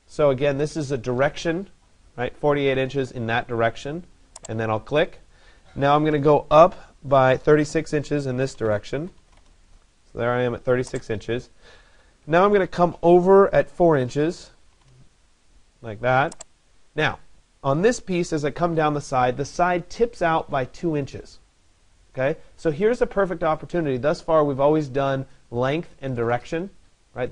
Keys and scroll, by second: 8.1 3, 13.7 4.